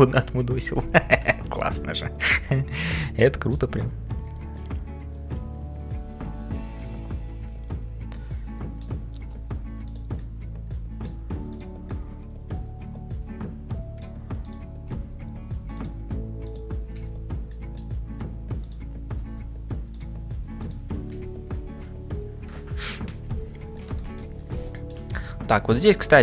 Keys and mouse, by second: 0.0-26.2 typing, 1.3 shift+middle click, 1.7 middle click, 3.2 middle click, 4.5-9.0 middle drag, 10.2-11.5 middle drag, 11.5 click, 12.0-14.1 middle drag, 16.4 click, 17.5 middle click, 23.8 middle click, 24.7 shift+middle click, 25.1-26.2 middle drag.